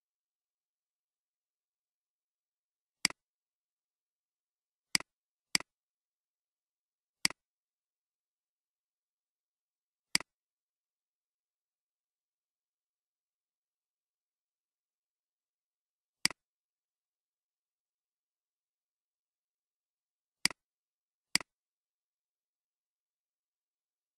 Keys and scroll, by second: 0.1-0.4 typing, 0.4 Return.